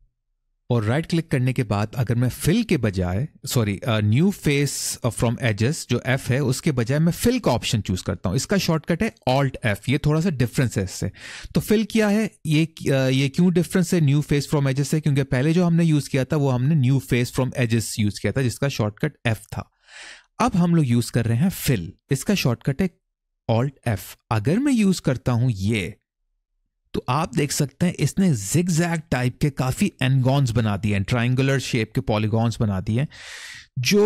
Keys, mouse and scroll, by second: 27.0 middle click, 27.8-29.0 scroll up 1, 30.3 middle click, 32.1 middle click.